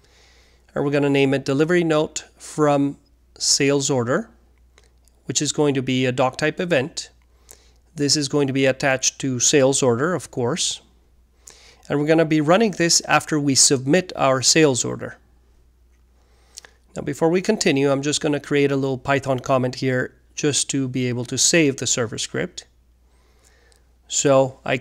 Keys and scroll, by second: 0.0-5.4 typing, 7.2-9.9 typing, 19.2 alt+3, 19.8-22.2 typing.